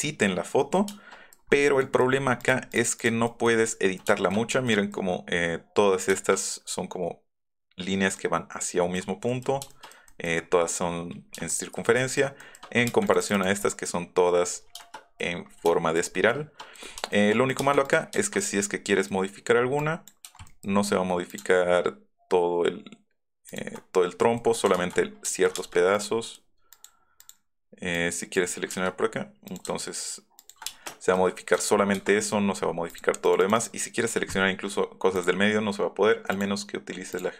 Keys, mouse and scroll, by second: 1.4 middle click, 1.4-1.8 scroll up 2, 1.7 middle click, 3.5 middle click, 4.3 middle click, 5.4 scroll down 2, 6.1 shift+middle click, 6.5 middle click, 7.4 middle click, 8.2 scroll up 1, 8.8 middle click, 9.1-9.6 scroll up 2, 9.4 middle click, 11.3-12.8 shift+middle drag, 12.9 space, 13.0 click, 13.2 click, 13.5 middle click, 14.6 shift+middle click, 15.8 shift+middle click, 17.5 space, 18.7 middle click, 20.4 click, 23.7 middle click, 24.1 middle click, 25.5 space, 25.6 scroll up 2, 26.0 click, 26.2 click, 26.7 click, 27.2 click, 27.9 click, 28.7 s, 29.4 click, 32.1 click, 32.8 click, 33.2 click, 33.4 click, 35.1 click, 36.3 click, 37.1 click.